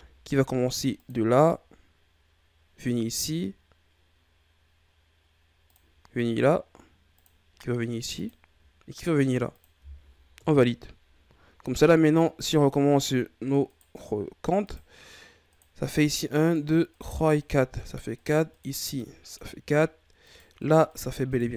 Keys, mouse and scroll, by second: 11.3-13.0 scroll up 2, 13.6 right click, 14.6 right click, 15.5 right click, 16.0 right click, 16.4 right click, 16.9 right click, 17.4 right click, 18.1 right click, 18.5 right click, 18.9 right click, 19.3 right click, 20.2 right click, 20.6 right click, 20.9 right click, 21.2 right click.